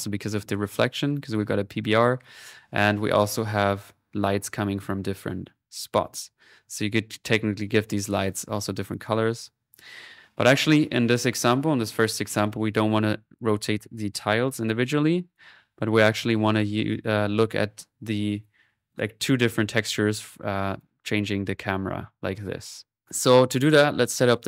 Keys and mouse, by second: 15.3 click, 20.8-24.0 drag, 23.6 middle click.